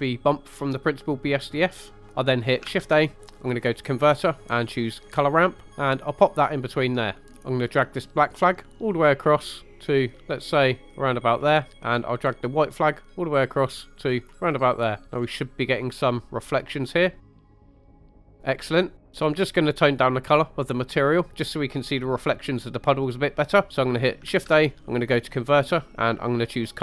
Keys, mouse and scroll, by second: 1.9 middle click, 2.8 shift+a, 6.2 click, 7.2 middle click, 7.2 scroll up 2, 8.1-11.4 drag, 12.2-14.3 drag, 14.6-15.0 scroll down 1, 15.1 scroll up 1, 15.8 scroll down 1, 16.2-18.4 middle drag, 19.0 middle click, 22.9 middle click, 23.7 shift+a, 24.3 shift+a.